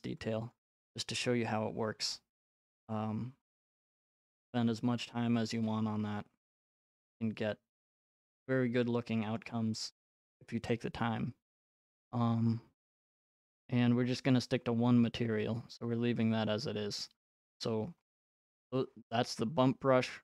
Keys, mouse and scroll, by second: 0.5 click, 0.7-2.6 scroll, 2.6-3.9 scroll, 2.7 right click, 5.1-5.5 scroll, 7.9 right click, 9.4-10.0 scroll, 17.9-20.2 scroll.